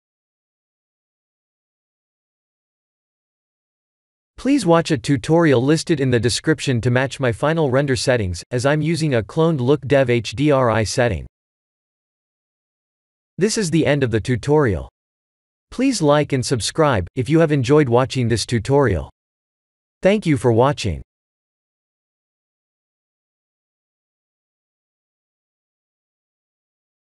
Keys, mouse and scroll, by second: 1.6 click, 2.4 click, 4.7 click, 10.2 click, 11.1 ctrl+s.